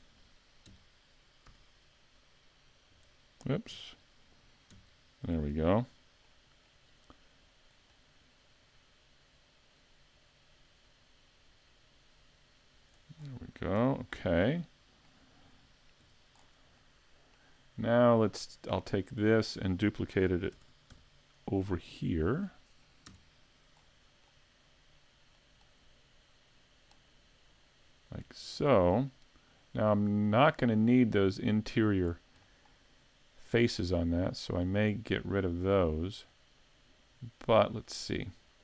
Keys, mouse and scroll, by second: 0.7 KP_7, 1.5 z, 2.9 KP_8, 3.7 KP_5, 4.8 KP_7, 5.4-6.1 scroll up 4, 6.3 shift+middle click, 7.7 click, 13.2-13.8 scroll down 3, 13.8 z, 14.1 middle click, 16.0 KP_5, 16.4-16.8 scroll down 2, 16.8 middle click, 18.7 right click, 19.1 middle click, 20.6 shift+d, 23.1 KP_Decimal, 23.8 middle click, 25.4 click, 32.1-32.4 scroll down 4, 32.4 middle click, 34.7 middle click.